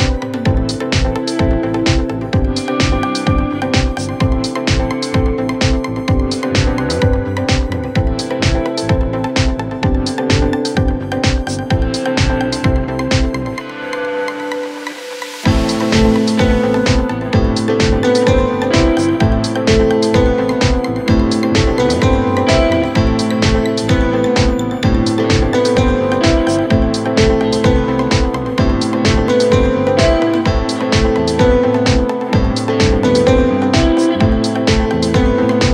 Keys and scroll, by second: 1.3 3, 9.9 ], 16.3 Delete, 17.9 ], 24.6 ], 28.5 ctrl+z, 28.8 ., 30.4 4, 31.8 3.